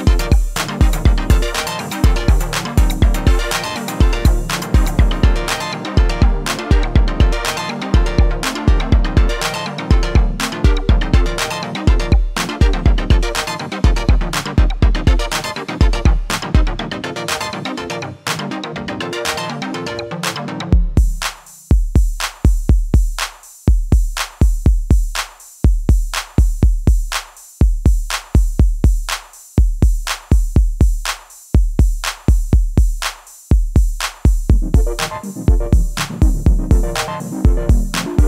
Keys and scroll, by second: 8.4 3, 11.6 s, 12.1 y, 15.6 s, 16.3 z, 29.9 1.